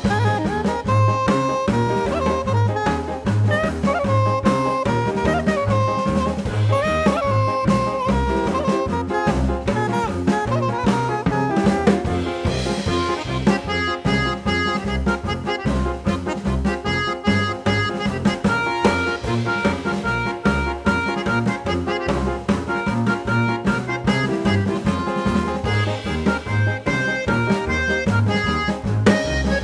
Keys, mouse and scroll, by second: 0.3 click, 2.6 click, 4.2 click, 4.6 ctrl+alt+c, 5.2-6.7 drag, 7.0 5, 8.6 ctrl+alt+c, 9.3 click, 10.7 ctrl+alt+c, 11.0 click, 12.1 ctrl+alt+c, 12.7 click, 13.6 ctrl+alt+c, 13.9 click, 14.8 ctrl+alt+c, 15.1 click, 17.3 ctrl+g, 17.9 click, 19.0 ctrl+alt+c, 19.5 click, 21.9 ctrl+g, 22.7 click, 23.3 ctrl+alt+c, 23.7 click, 26.2 click, 27.1 click, 28.2 click, 29.0 click.